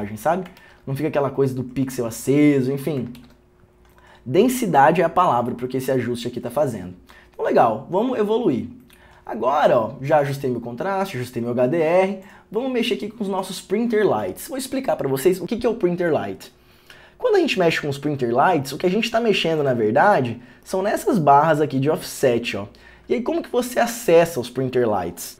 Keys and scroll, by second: 3.3 ctrl+d.